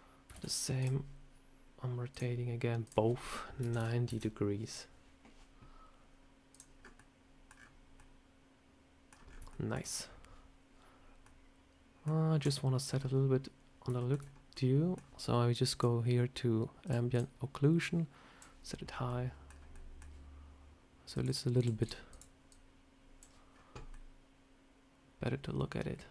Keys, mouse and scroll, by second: 0.2 shift+d, 2.0 click, 2.7 click, 6.4 click, 6.7 scroll up 3, 6.8 middle click, 7.4 scroll down 5, 7.8 scroll up 1, 7.8 middle click, 9.0 scroll down 1, 9.1 scroll up 3, 9.4 shift+middle click, 11.1 middle click, 12.3 z, 13.2 scroll up 2, 13.9 shift+middle click, 14.1 scroll down 2, 14.4 middle click, 15.6 click, 16.7 click, 17.0 click, 17.7 click, 18.8 scroll up 3, 18.9 middle click, 19.3 scroll down 2, 19.6 middle click, 21.0 click, 22.4 click, 23.4 scroll down 2, 23.8 middle click.